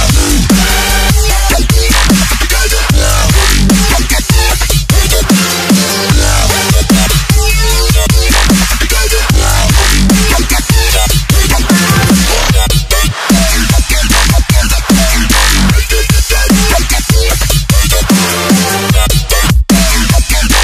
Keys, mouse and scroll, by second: 1.0 scroll down 1, 1.8 click, 2.4 ctrl+c, 2.8 click, 3.7 ctrl+v, 4.1 click, 4.2 Return, 4.6 click, 9.0-9.7 alt+scroll down 1, 9.7 ctrl+0, 9.8 click, 10.4 s, 16.3 click, 18.9-19.6 scroll down 1, 19.6-20.6 scroll up 1.